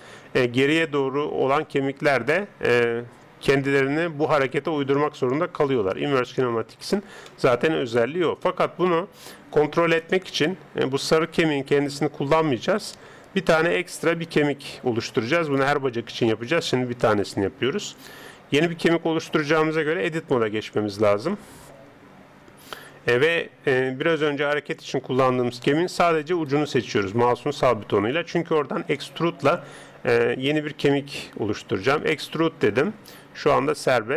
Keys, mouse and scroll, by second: 7.3-11.4 middle drag, 11.4 g, 20.0 Tab, 26.3 right click, 29.0-32.0 middle drag, 32.0 e.